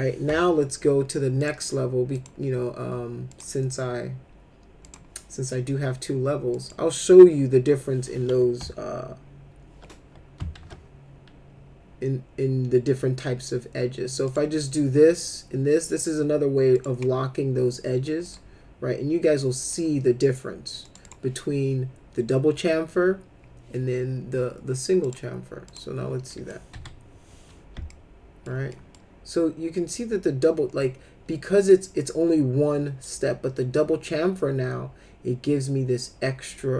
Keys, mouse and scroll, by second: 0.2 F4, 1.4 click, 2.1 click, 3.3 click, 4.8 click, 6.5 click, 10.5 alt+1, 14.3 click, 16.7 click, 18.2 click, 19.6 click, 20.8 click, 21.0 right click, 25.0 click, 25.7 click, 26.3 middle click, 26.7 F4, 27.9 alt+middle click, 28.7 middle click.